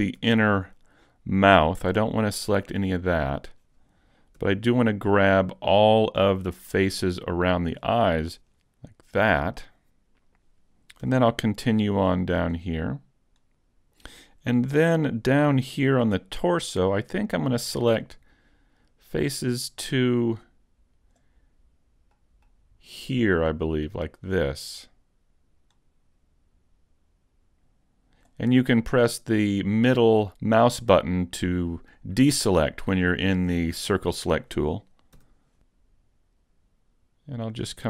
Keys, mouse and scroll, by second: 0.3 scroll up 1, 0.3 z, 0.5 middle click, 2.2-2.6 scroll down 2, 2.7 middle click, 4.4 c, 8.2 right click, 8.4 z, 8.8-9.5 scroll down 2, 9.3 middle click, 11.1 c, 13.1 shift+middle click, 13.1 scroll down 1, 13.5 middle click, 15.9 c, 30.7 middle click, 32.1-32.5 scroll up 1, 32.5 middle click, 33.1 shift+middle click, 33.7 middle click, 35.1 c.